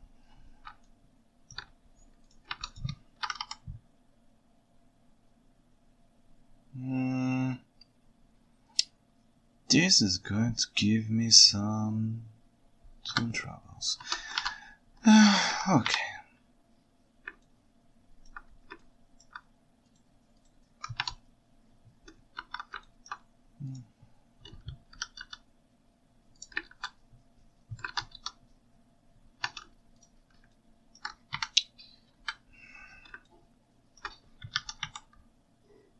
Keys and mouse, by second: 0.9-1.5 ctrl+shift+middle drag, 2.5 ctrl+Tab, 3.3 r, 3.4 y, 14.1 ctrl+Tab, 14.4 alt+a, 15.2 ctrl+alt+right drag, 15.9 KP_1, 17.5-18.3 ctrl+alt+right drag, 18.8-19.3 ctrl+alt+right drag, 22.4 alt+a, 22.9 ctrl+alt+right click, 24.9 g, 25.3 z, 26.7 alt+z, 27.9 alt+a, 28.3 Tab, 29.5 ctrl+Tab, 30.6-31.0 ctrl+shift+right drag, 31.4 KP_1, 32.1 KP_9, 33.3-34.0 ctrl+alt+drag, 34.7 r, 34.8 y.